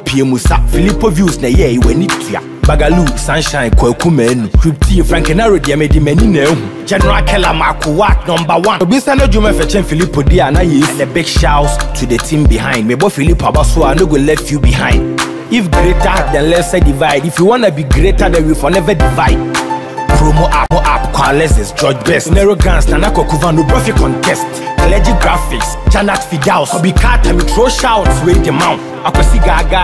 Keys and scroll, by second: 12.7 BackSpace, 15.3 Return, 22.8 BackSpace, 23.1 Return.